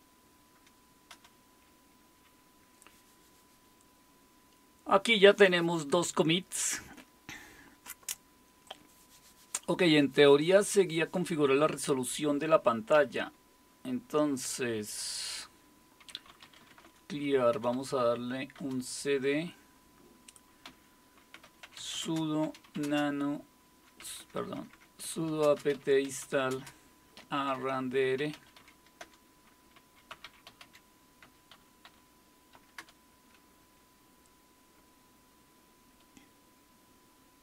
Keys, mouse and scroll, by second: 1.1 Return, 8.6 click, 12.9 typing, 15.3 click, 15.9-18.0 typing, 18.5 Return, 19.2-32.8 typing.